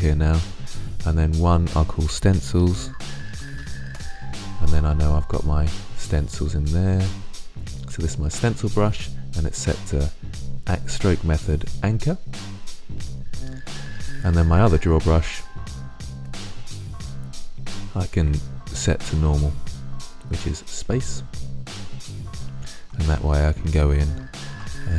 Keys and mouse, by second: 1.1-3.1 drag, 9.2-11.1 drag, 16.0 click, 17.5-19.2 drag, 19.4-19.8 drag, 20.7 click, 21.2-21.7 middle drag, 21.9-24.9 drag.